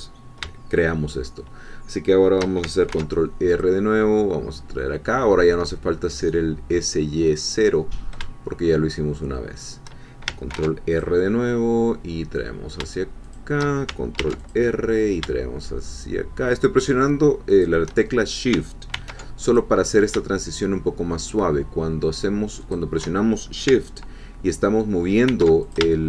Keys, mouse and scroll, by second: 2.9 ctrl+r, 3.5 click, 9.5 shift+click, 10.5 ctrl+r, 10.9 ctrl+click, 13.3 shift+click, 14.2 ctrl+r, 14.4 ctrl+click, 17.5 shift+click, 18.9 ctrl+r, 19.5 ctrl+click, 22.6 shift+click, 25.3 ctrl+r, 25.6 ctrl+shift+click.